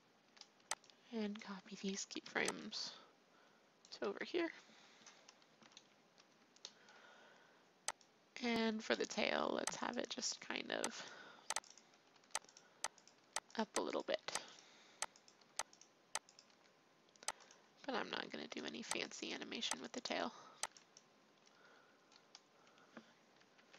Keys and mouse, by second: 0.2 a, 0.5 b, 2.2 ctrl+c, 2.6 click, 4.0 ctrl+v, 5.6 KP_3, 5.7 click, 6.7 click, 9.8 middle click, 10.1 r, 11.6 middle click, 12.1 r, 13.1 r, 14.0 r, 15.4 r, 16.4 r, 18.3 a, 18.9 b, 19.4 b, 20.6 b, 23.5 ctrl+c.